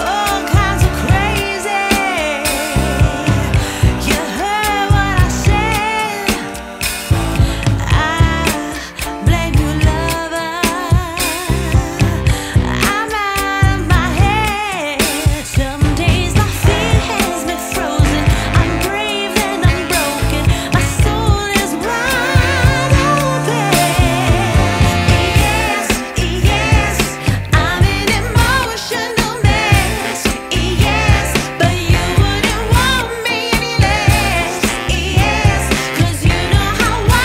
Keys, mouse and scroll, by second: 6.6 space, 7.4 scroll up 1, 7.6-8.7 scroll down 1, 8.7 scroll down 1, 8.8 ctrl+s, 9.7-10.9 drag, 10.9-13.1 right drag, 13.1-17.5 drag, 17.5-20.5 right drag, 21.6-24.8 drag, 24.8-26.2 right drag, 26.2 ctrl+s, 26.7 space, 27.6 scroll up 1, 28.4 scroll down 2, 29.3-30.9 middle drag, 30.9-32.7 drag, 32.7-33.3 scroll up 5, 34.2 scroll down 2, 35.0 scroll down 2, 36.0 scroll up 1.